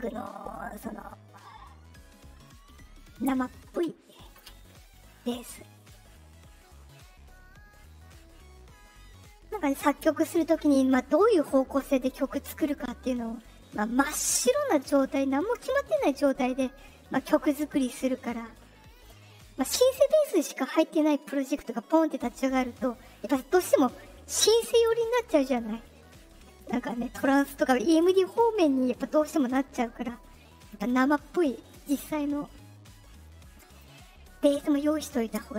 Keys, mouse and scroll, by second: 3.1 click, 3.7 Return, 5.7 right click, 33.7 click, 34.8 right click.